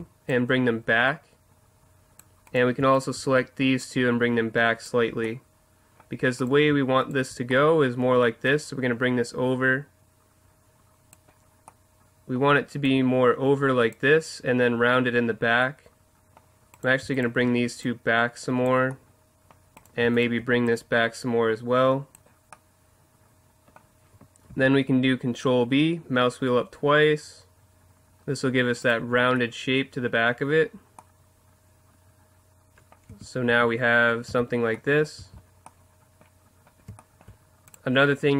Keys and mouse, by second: 0.3-2.2 drag, 2.5-4.8 right drag, 3.8-5.6 drag, 5.2 middle click, 7.7 right click, 8.5 middle click, 8.9-10.1 drag, 10.1 click, 12.8-14.7 drag, 16.7-18.6 right drag, 17.8-18.8 drag, 19.0 click, 19.8-21.9 right drag, 20.7-22.4 drag, 24.5 ctrl+b, 28.9 click, 29.3-30.6 middle drag, 33.1 Tab, 33.5 Tab, 34.3 z, 35.2 z.